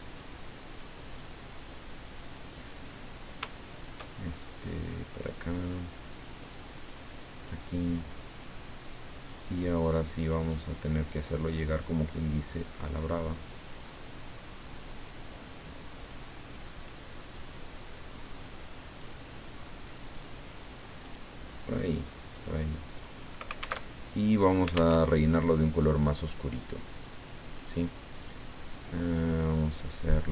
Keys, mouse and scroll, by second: 1.2-3.0 drag, 4.4-6.0 shift+drag, 6.5-7.9 drag, 10.4 click, 11.8-13.6 drag, 14.7-17.0 drag, 17.3-19.2 drag, 20.2 click, 22.3 click, 23.9 alt+Tab, 25.0 alt+Tab, 28.2 click, 29.6 click.